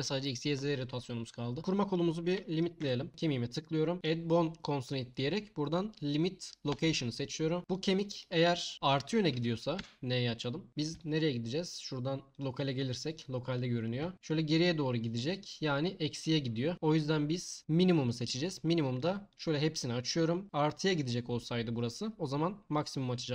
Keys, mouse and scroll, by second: 2.8 n, 3.1 Tab, 4.0 click, 4.8-6.8 drag, 9.8 n, 11.4 click, 11.8-13.2 drag, 14.1 g, 14.1 x, 19.3 click, 19.8-23.3 drag.